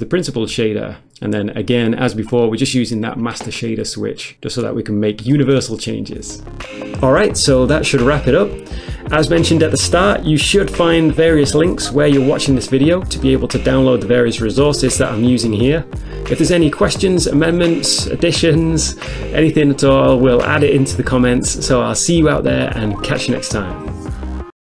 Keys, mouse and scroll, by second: 0.8 ctrl+shift+click, 1.3 middle click, 1.5 middle click, 1.6-2.9 scroll up 1, 2.9 scroll up 1, 3.7 middle click, 4.0 middle click, 4.6 scroll down 1, 5.3 shift+middle click, 5.6 middle click, 5.9 middle click.